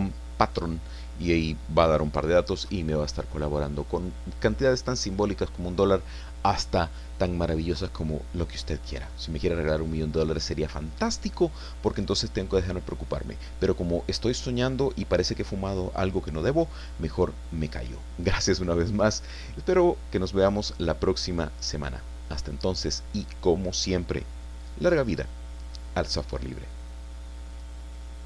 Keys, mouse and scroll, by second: 27.5 click.